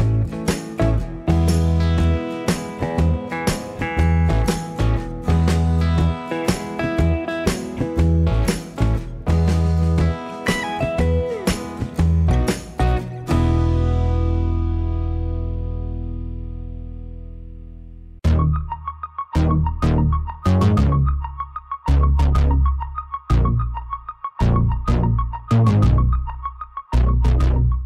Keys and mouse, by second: 1.7-9.8 middle drag, 2.0 Delete, 2.3 Tab, 3.5 Tab, 3.5 2, 3.9 alt+z, 4.6 2, 9.8 ctrl+click, 9.9-20.2 ctrl+middle drag, 11.9 e, 13.7 g, 14.3 click, 14.4 g, 16.3 1, 16.5 shift+click, 16.7 m, 18.4 shift+click, 18.6 m, 20.1 d, 20.2 click, 20.6 d, 20.8-24.5 shift+right drag, 20.8 d, 21.1 2, 22.4 ctrl+click, 23.0 ctrl+click, 23.4 ctrl+click, 24.5 ctrl+click, 24.6-27.8 ctrl+right drag, 26.5 e.